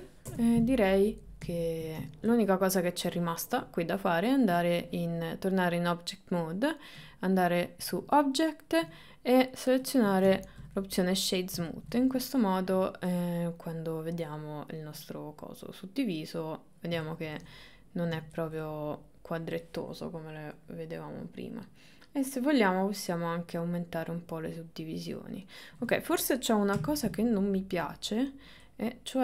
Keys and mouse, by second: 0.3 Tab, 0.8 middle click, 2.6 click, 7.1-10.1 drag, 10.6 shift+middle click, 10.8 middle click, 13.3-17.4 middle drag, 17.5-18.6 middle drag, 22.4 click, 23.0-25.8 middle drag, 26.8 Tab, 27.9 click, 28.2 middle click, 29.0 click.